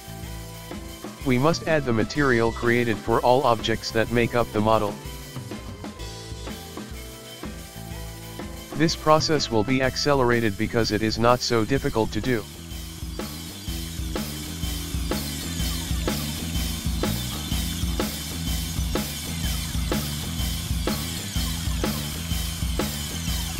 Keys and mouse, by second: 0.6 click, 0.9-2.0 drag, 2.4 ctrl+middle click, 3.8-4.8 drag, 5.0 ctrl+shift+middle click, 5.5 right click, 5.9 click, 7.0 ctrl+shift+middle click, 7.5 right click, 7.8 drag, 8.7-9.8 ctrl+drag, 9.8 right click, 10.1-11.4 drag, 11.4-11.9 right drag, 11.9-12.3 shift+middle drag, 12.7 click, 13.6 ctrl+middle click, 13.8 right click, 14.0 shift+middle drag, 14.3 right click, 14.7 shift+middle click, 14.9 right click, 15.3 ctrl+click, 16.1 shift+middle click, 16.6 drag, 16.8 click, 17.3 right click, 17.5 click, 17.9 shift+middle click, 18.2 right click, 18.5 click, 18.8 ctrl+shift+middle drag, 19.1 right click, 19.4 click, 19.7 shift+middle click, 20.0 right click, 20.2 click, 20.5-20.9 ctrl+shift+middle drag, 20.9 right click, 21.1 click, 21.5-22.1 ctrl+middle drag, 22.1 right click, 22.4 click, 23.3-23.5 ctrl+middle drag.